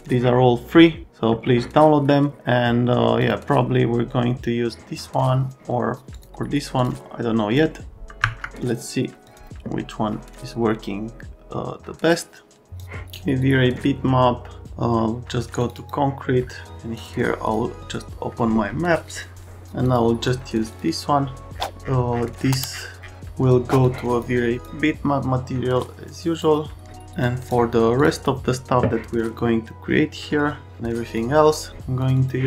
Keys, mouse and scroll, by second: 12.8 click, 14.6 click, 15.6 click, 15.7 click, 16.9 click, 17.4 click, 19.8 click, 20.7 click, 20.8 click, 23.8 click, 24.6 click, 25.8 click, 27.2 click, 27.9 click, 28.1 click, 31.1 click, 32.0 click, 32.2 click.